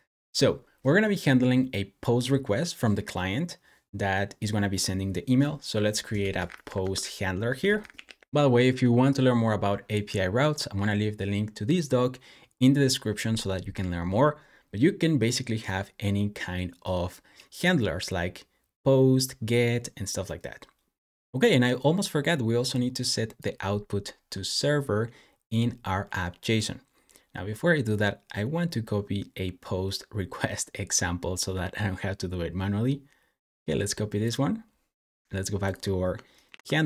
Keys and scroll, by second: 5.6-8.4 typing, 36.3 super+v.